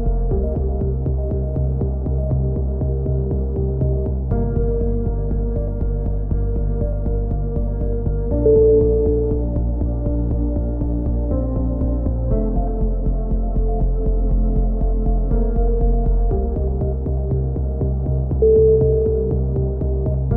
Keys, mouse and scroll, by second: 0.5 KP_3, 1.3 Tab, 1.8-2.8 drag, 2.6 z, 3.5-4.5 drag, 4.8 click, 6.5 click, 6.6 middle click, 7.0 right click, 8.0 click, 8.3 middle click, 9.1 right click, 9.9 click, 10.8-12.6 middle drag, 12.6 a, 13.3 ctrl+z, 14.5 a, 14.5 z, 15.2 middle click, 15.8 z, 16.6 a, 16.7 z, 17.2 Tab, 18.1 Tab, 19.4 click, 19.8 click.